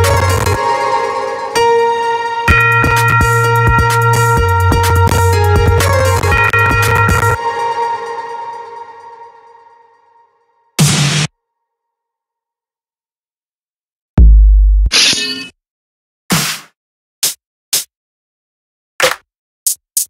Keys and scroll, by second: 6.8 space.